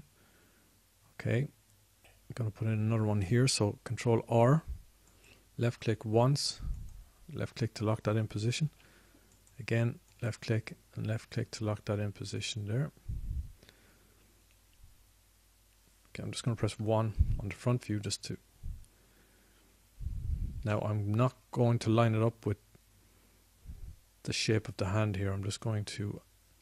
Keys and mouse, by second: 5.1 ctrl+r, 8.2-9.9 drag, 9.9 ctrl+r, 18.0 KP_1.